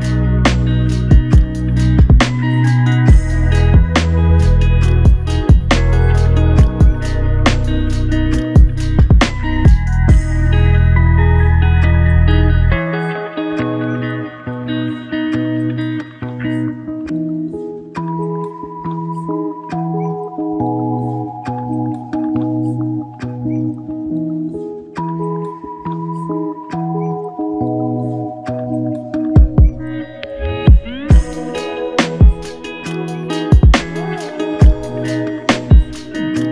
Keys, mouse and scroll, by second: 1.1 double click, 4.7 click, 4.9 alt+click, 6.8-7.5 typing, 7.1 ctrl+alt+click, 10.5 double click, 11.9 alt+click, 14.0 ctrl+alt+click, 15.3 alt+click, 17.0 double click, 17.8 alt+click, 19.3 double click, 20.7 alt+click, 21.6 alt+click, 23.0 double click, 23.8 alt+click, 26.3 alt+click, 28.9 double click, 30.0 alt+click, 32.8 double click.